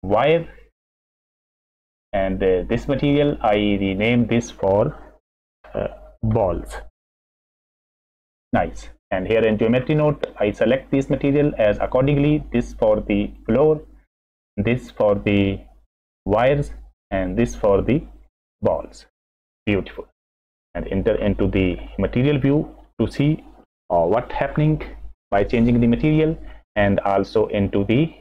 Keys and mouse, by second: 2.0 click, 3.1-3.9 drag, 4.0-8.4 drag, 8.4 l, 10.3 click, 12.5 click, 14.4-16.2 drag, 17.1-18.4 drag, 20.5 click, 21.1 middle click, 21.9 middle click.